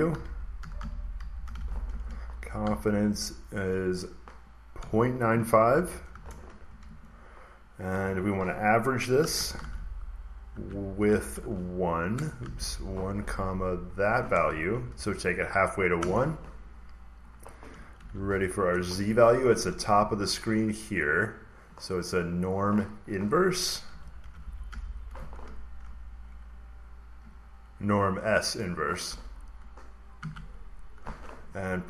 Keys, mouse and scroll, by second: 0.0-2.5 typing, 4.6-5.9 typing, 6.0 Return, 6.7 Up, 6.7 Right, 7.8-10.0 typing, 10.4 Tab, 11.3-13.0 typing, 13.8-16.5 drag, 14.6 Return, 16.4 typing, 17.2-19.3 drag, 17.7-20.7 typing, 20.4 click, 22.3 click, 23.5-25.1 typing, 25.6 Down, 27.1 Down, 30.1 Tab.